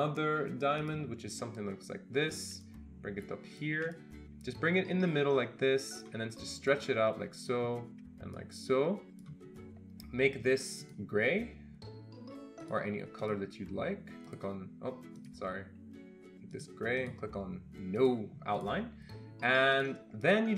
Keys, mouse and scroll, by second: 0.8 click, 3.0-4.0 shift+drag, 4.3-6.1 shift+drag, 7.0 shift+click, 8.7 click, 12.6 click, 13.2 click, 14.2 click, 15.2 click, 17.0 click, 17.9 click, 18.6 click, 19.7 click, 20.3 click.